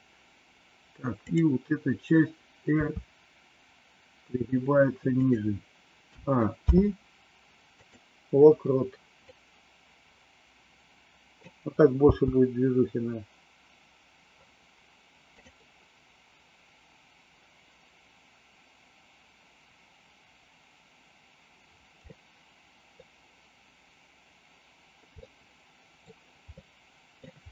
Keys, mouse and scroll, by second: 2.7 r, 6.0 a, 6.5 i, 9.2-11.5 drag, 12.0 space, 15.2 click, 22.0 middle click, 25.2 middle click, 26.5 middle click.